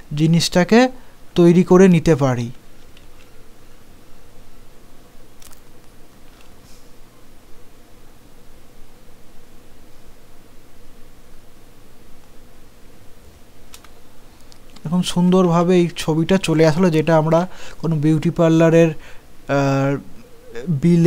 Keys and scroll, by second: 3.0 ctrl+z, 15.5 ctrl+a, 17.2 ctrl+g.